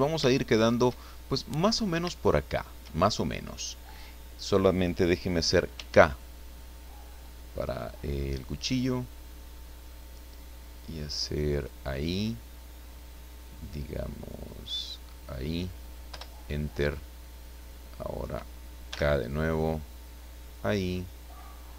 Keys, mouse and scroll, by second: 0.3 shift+middle click, 1.3 shift+middle click, 2.1 shift+middle click, 3.8 click, 5.7 k, 11.6 click, 15.1 click, 16.1 Return, 18.9 k, 20.4 click.